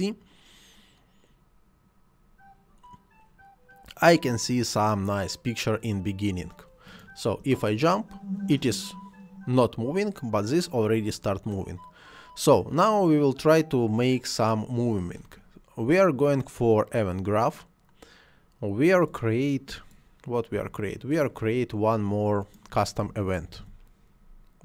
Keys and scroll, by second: 7.4 space, 20.6 Delete, 23.0 c, 23.5 u, 23.6 s.